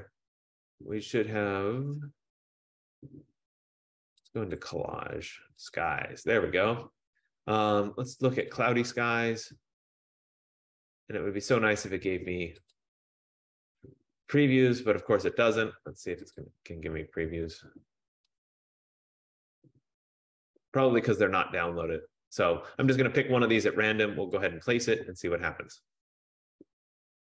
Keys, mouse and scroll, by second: 4.5 click, 4.7 click, 5.9 click, 6.1 click, 8.7 click, 8.9 click, 12.9 click, 14.8 F15, 16.5 click, 18.8 click, 24.6 click.